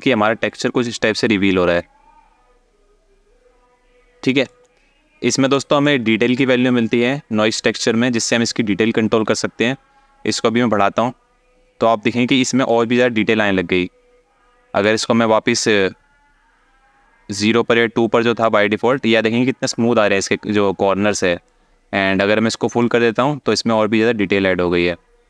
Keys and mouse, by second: 5.3 alt+shift+middle click, 10.6-11.6 drag, 12.6 alt+shift+middle click, 14.6-18.1 drag, 21.1-22.7 drag.